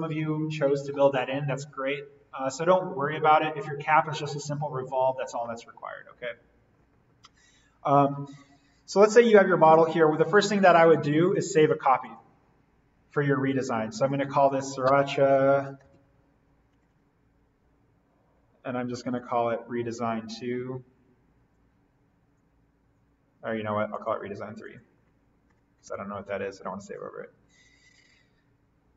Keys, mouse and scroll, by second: 4.2-7.8 scroll up 1, 7.8-8.9 scroll down 1, 10.4 click, 14.8-16.7 typing, 19.0 click, 24.0 click, 25.4 BackSpace, 25.9 3, 26.8 click.